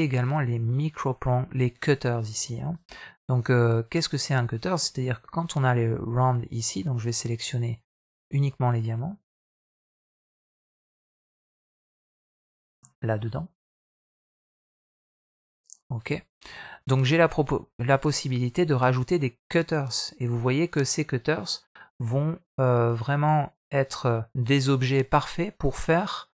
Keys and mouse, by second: 14.0-14.9 right drag, 19.4-23.0 drag, 23.6-26.3 middle drag.